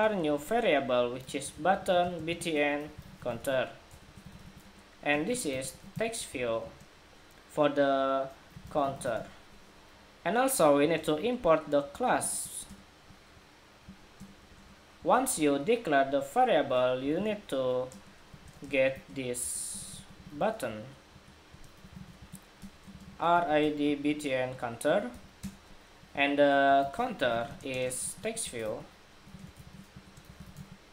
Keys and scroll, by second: 10.8 alt+Return, 12.1 alt+Return.